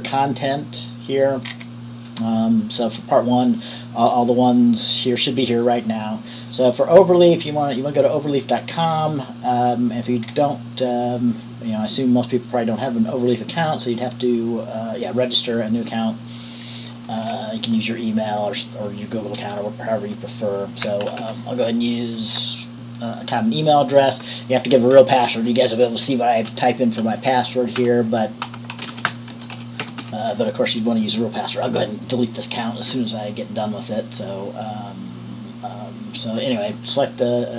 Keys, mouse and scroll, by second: 1.7-6.0 scroll down 1, 6.6-7.8 drag, 8.3 click, 15.4 click, 16.7-21.5 drag, 21.5 typing, 22.5 click, 24.2 click, 26.7-27.2 typing, 28.3-30.2 typing, 35.4-37.5 drag.